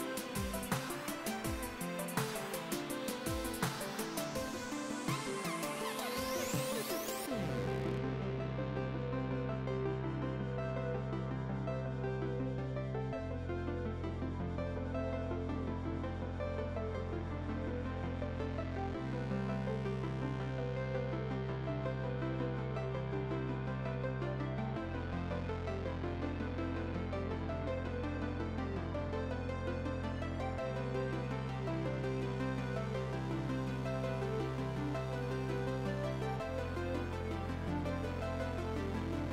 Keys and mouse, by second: 3.9 ctrl+1, 4.0 click, 5.3 ctrl+r, 5.7 click, 6.1 KP_9, 6.2 Return, 6.6 ctrl+x, 7.0 click, 9.4 click, 9.6 Delete, 11.3 click, 14.9 KP_1, 15.0 Return, 15.3 click, 17.5 s, 17.8 click, 18.8 click, 20.1 click, 22.4 KP_5, 22.5 Return, 22.7 click, 23.3 click, 32.0 ctrl+click, 32.3 click, 36.9 ctrl+1, 36.9 click, 37.8 click, 38.9 click.